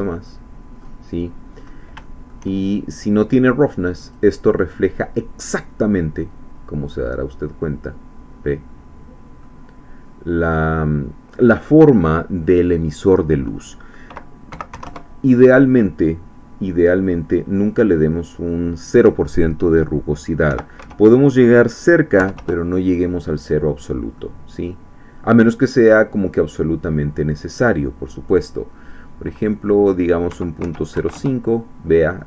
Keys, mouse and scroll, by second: 0.1-1.1 middle drag, 1.6-1.9 scroll up 2, 2.0 shift+middle click, 3.3 click, 4.7-9.6 middle drag, 10.4-14.5 drag, 14.5 ., 14.7 1, 14.8 Return, 17.7 click, 20.5 ., 20.8 0, 22.3 Return, 24.2-25.5 middle drag, 25.6-27.1 middle drag, 27.2 scroll up 2, 28.3-30.3 drag, 30.3 KP_Decimal, 30.6 KP_0, 30.9 KP_5, 31.1 KP_Enter.